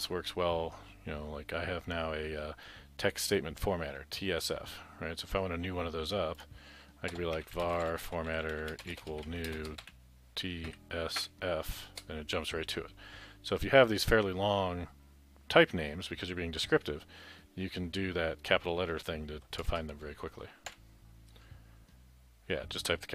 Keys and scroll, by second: 7.3-11.3 typing, 19.7 shift+Home, 20.7 Delete.